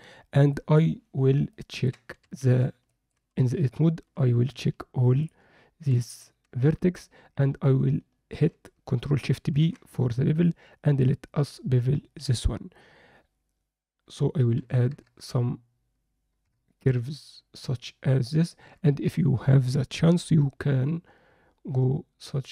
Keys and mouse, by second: 1.5-1.8 ctrl+alt+middle drag, 2.4 Tab, 2.9 alt+shift+middle click, 3.4 click, 5.2 shift+click, 9.5 ctrl+shift+b.